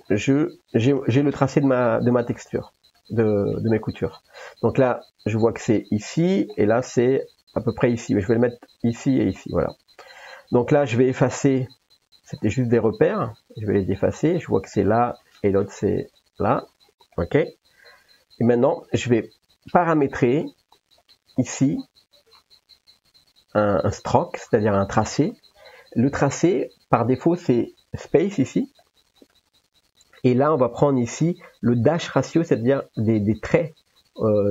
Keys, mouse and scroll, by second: 1.0 ctrl+s, 2.4 middle click, 5.5-6.1 drag, 6.6 middle click, 12.8-19.9 drag, 12.8 x, 19.9 n, 23.7 click, 28.8 click, 32.1-33.6 drag.